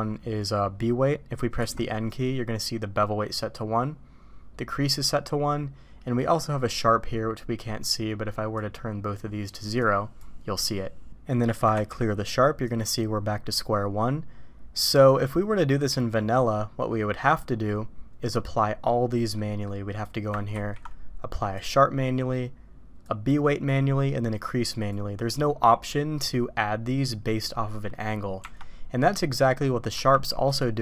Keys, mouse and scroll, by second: 1.6 n, 8.5 click, 9.8 click, 11.3 middle click, 15.2-17.5 middle drag, 19.3 middle click, 20.5 ctrl+e, 23.1 click, 24.4 click, 28.4 Tab, 29.3 middle click, 29.9 q.